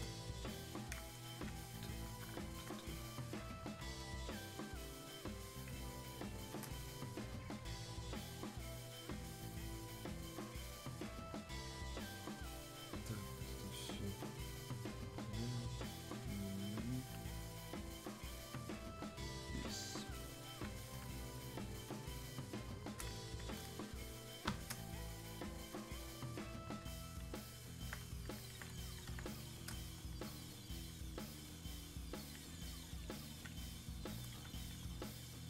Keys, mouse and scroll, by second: 8.2 shift+click, 14.7 shift+click, 22.2-35.4 shift+drag.